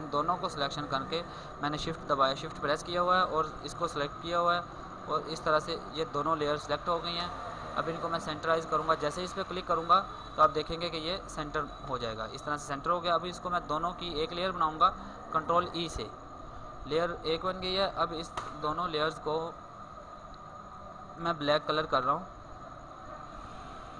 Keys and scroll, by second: 14.8 ctrl+e.